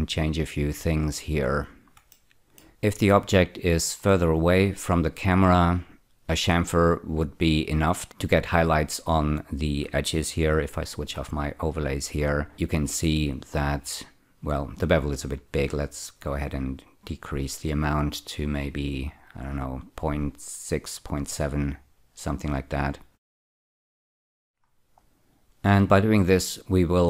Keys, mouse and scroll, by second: 2.1 middle click, 3.8-6.2 scroll down 7, 11.8 click, 16.1-19.5 shift+drag, 20.3 shift+click, 20.6-21.8 shift+drag, 23.1 scroll down 2, 23.4 shift+middle click, 23.9-24.9 scroll up 7.